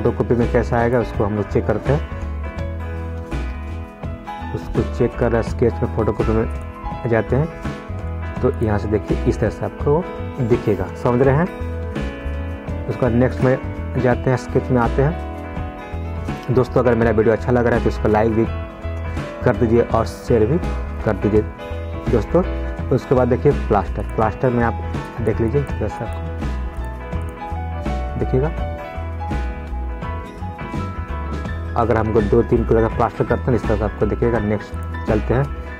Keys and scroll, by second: 11.7 ctrl+z, 33.4 ctrl+z.